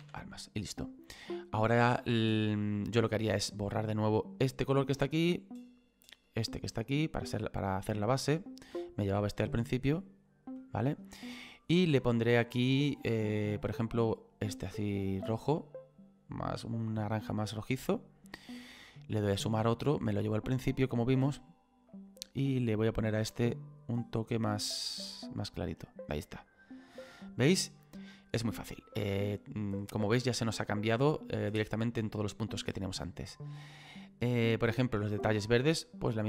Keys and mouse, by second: 0.7 click, 3.4 click, 5.5 click, 8.6 click, 9.8 click, 11.6 click, 13.8 click, 18.2 click, 19.3 click, 23.0 click, 24.9 click, 29.3 click, 35.8 click.